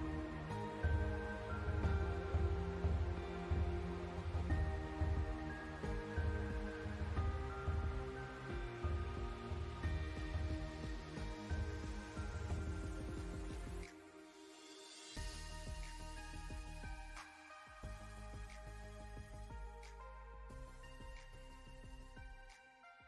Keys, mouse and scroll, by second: 2.6 ctrl+Num_Lock, 2.7 ctrl+z, 3.2-7.8 drag, 7.8-10.6 drag, 13.0-14.7 drag, 14.7 alt+scroll down 1, 15.0 alt+scroll up 1, 15.9 click, 16.1-16.6 alt+scroll up 1, 17.3 click, 18.4 alt+scroll down 1, 19.1 click, 20.2 click.